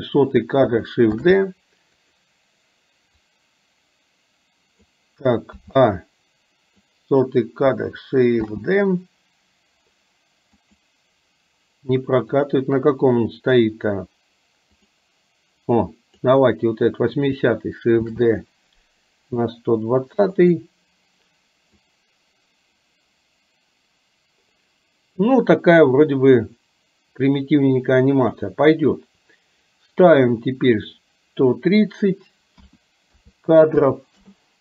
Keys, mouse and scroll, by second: 1.2 shift+d, 3.4 click, 5.6 a, 6.9-7.5 drag, 8.5 shift+d, 12.5 click, 14.9 click, 16.0 click, 18.1 shift+d, 22.0-28.5 drag, 30.9-34.4 drag.